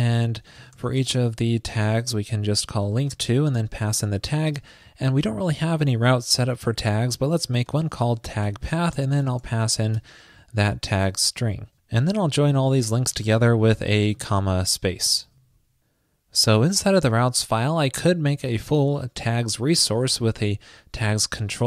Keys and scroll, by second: 15.3 super+s.